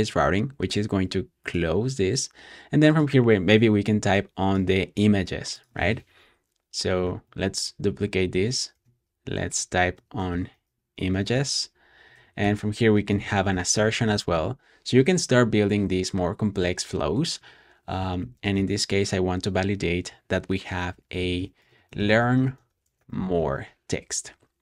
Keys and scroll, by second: 5.8-14.7 typing, 16.5-16.8 typing, 18.1-20.2 typing, 21.2-23.7 typing.